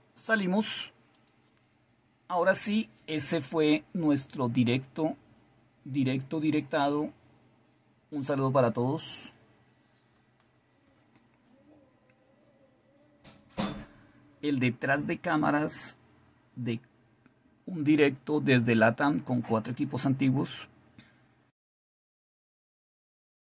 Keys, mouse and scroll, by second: 1.1 click, 4.5 click.